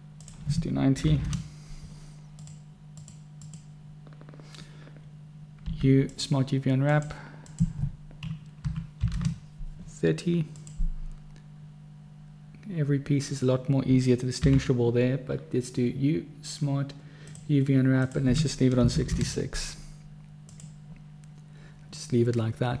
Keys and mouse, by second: 5.9 u, 14.8 u, 19.3 6.